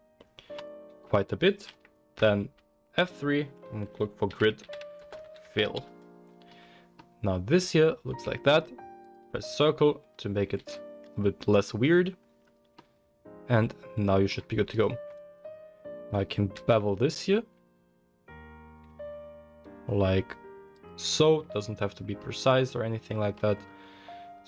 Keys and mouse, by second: 2.2 F3, 5.6 l, 9.0-11.7 drag, 10.6 s, 11.7-13.3 middle drag, 16.5 ctrl+b, 21.4 Tab, 21.5-23.0 middle drag, 23.4 Tab.